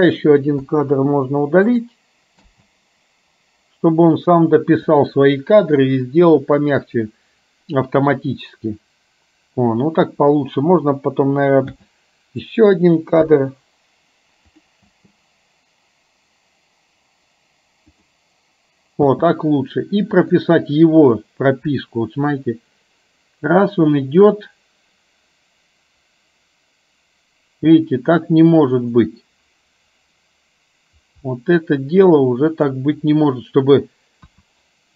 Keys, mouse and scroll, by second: 0.7 Delete, 1.9 click, 2.5 space, 11.7 space, 12.5 click, 13.2 Delete, 14.5-14.9 drag, 15.0 space, 18.1 drag, 19.1 space, 20.2 click, 22.5-32.9 drag, 34.4 KP_1.